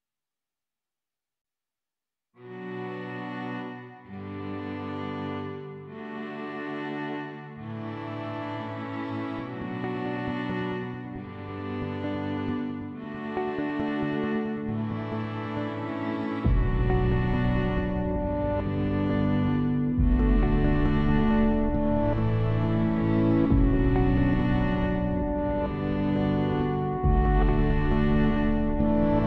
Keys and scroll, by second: 23.8-26.5 typing, 28.4-29.2 typing.